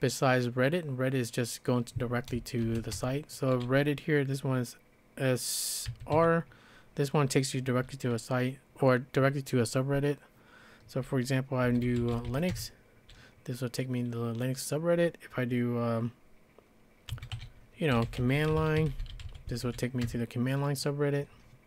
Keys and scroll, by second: 2.4-3.3 typing, 5.9 typing, 11.4-12.8 typing, 16.9-20.5 typing.